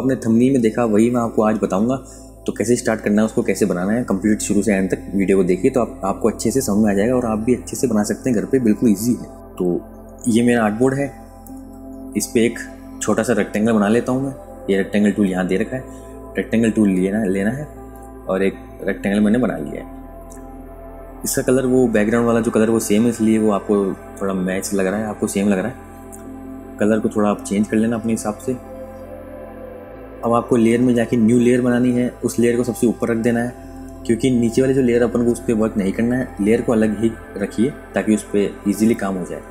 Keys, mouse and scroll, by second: 6.8 Return, 8.4 Return, 9.9 Return, 11.2 Return, 12.9 Return, 16.4 KP_Subtract, 17.6 click, 21.8 click, 31.1 click.